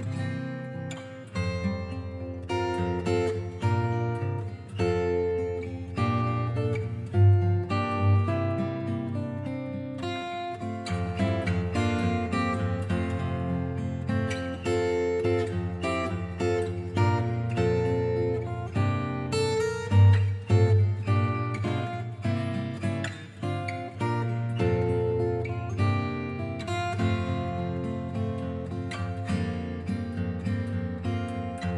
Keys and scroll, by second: 19.1-21.3 scroll down 1, 21.7-23.2 scroll up 1, 28.6-29.4 scroll up 1, 29.4-30.3 scroll down 1, 30.3-31.7 scroll up 1.